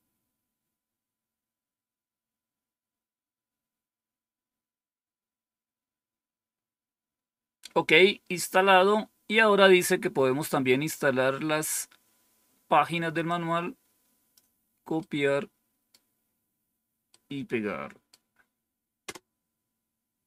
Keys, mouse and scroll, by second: 13.2-14.3 drag, 14.9 right click, 17.0-18.1 right drag, 19.0 Return.